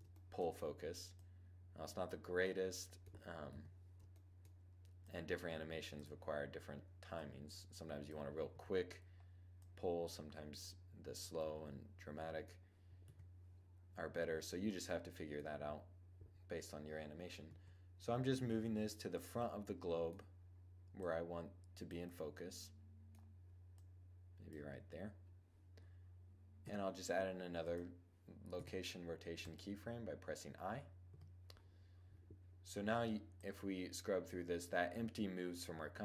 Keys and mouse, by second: 0.1-0.7 middle drag, 0.7-2.3 drag, 3.1 KP_7, 8.1-11.6 drag, 12.6 7, 17.1 g, 19.1 middle click, 20.5-22.0 drag, 22.4 middle click, 23.4-26.2 drag, 26.2 i, 28.1 i, 30.6 0, 33.0-34.8 drag.